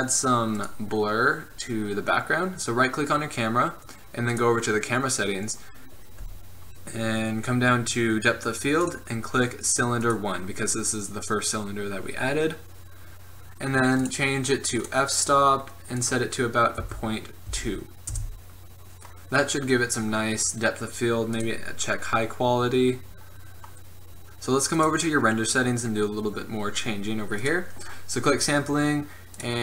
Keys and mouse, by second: 0.2-2.7 drag, 4.4-10.7 drag, 10.7-16.0 middle drag, 16.0-19.9 drag, 21.5-23.3 drag, 24.2-27.1 drag, 27.5-29.6 drag.